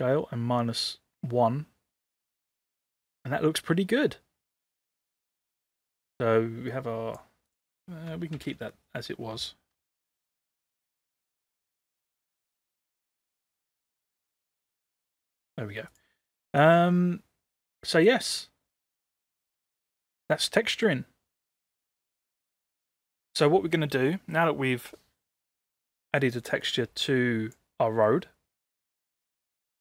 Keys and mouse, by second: 5.7-7.2 drag, 7.5 click, 8.4 ctrl+z, 10.2 click, 11.1 click, 14.0 ctrl+z, 14.5 ctrl+z, 15.3 click, 16.9-18.1 middle drag, 18.6 middle drag, 19.4-21.0 middle drag, 21.5 middle drag, 22.6 middle click, 26.7 click, 28.0-28.9 middle drag, 29.3 middle click, 29.4 middle drag.